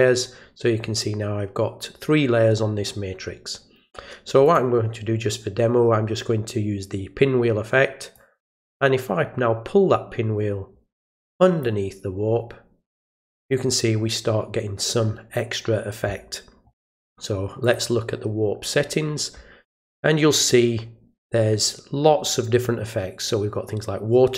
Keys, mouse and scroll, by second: 4.4 click, 8.1-11.6 drag, 12.9 click, 17.6 click, 20.3 click.